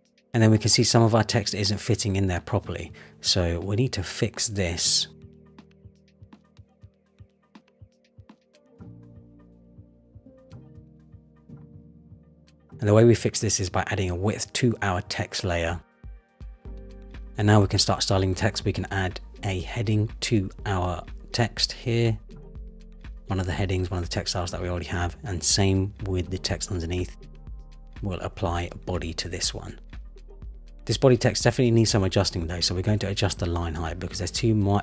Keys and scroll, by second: 4.9 Return, 10.3 Return, 14.6 super+z, 15.3 Return.